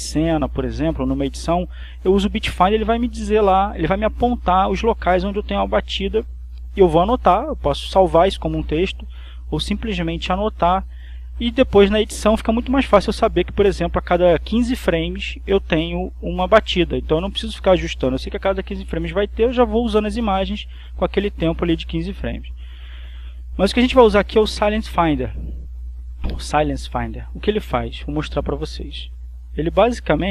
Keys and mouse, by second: 28.2 click, 30.2 click.